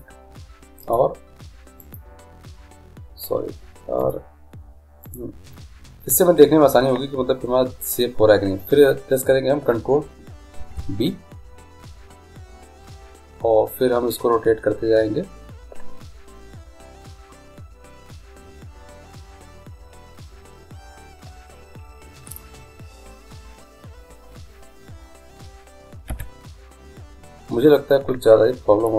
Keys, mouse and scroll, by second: 1.9 click, 5.1 click, 10.6 ctrl+b.